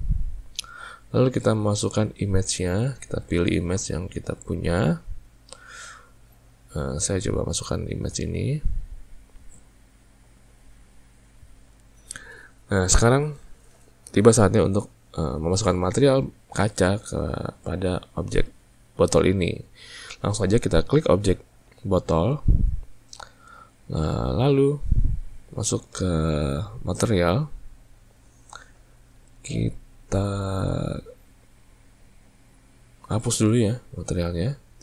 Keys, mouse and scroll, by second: 2.8-5.9 drag, 21.3 click, 27.0 click, 33.6-34.8 drag.